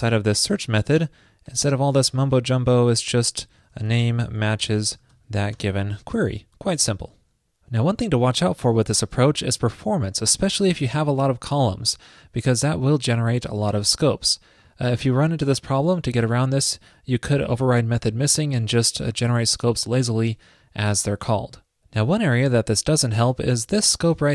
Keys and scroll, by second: 4.6 alt+Right, 4.9 alt+Right, 6.2 super+s.